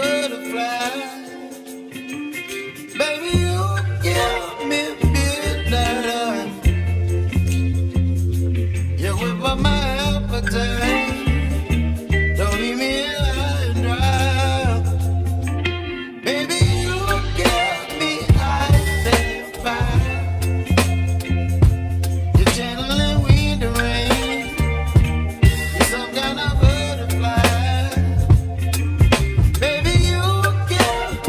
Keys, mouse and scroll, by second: 1.4 shift+s, 2.8 shift+s, 3.7-5.8 middle drag, 5.8 click, 5.8-7.7 middle drag, 6.3-9.3 drag, 8.8 shift+s, 9.3 shift+s, 10.0-10.3 scroll down 1, 10.3-11.4 middle drag, 12.4-14.2 shift+middle drag, 14.2 shift+a, 15.9 shift+a, 17.8 s, 22.0 s, 24.8 s, 29.1-30.7 middle drag.